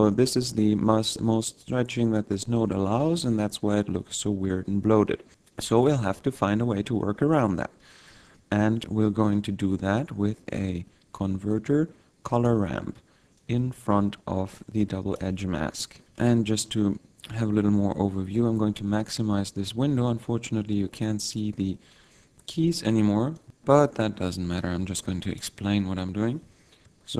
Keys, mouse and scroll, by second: 8.2 shift+a, 13.8 click.